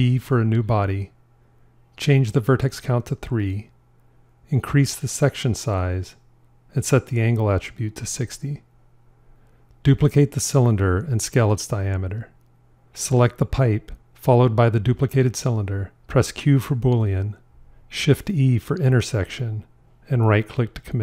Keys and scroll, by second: 10.4 shift+d, 11.4 s, 17.1 q, 18.9 shift+e.